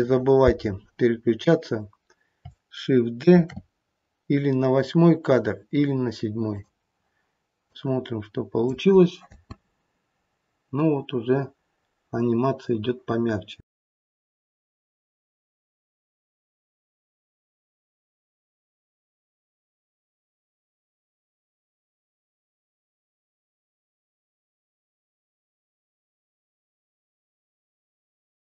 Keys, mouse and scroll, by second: 3.4 shift+d, 7.7 click, 9.2 space, 11.5-12.2 scroll down 1.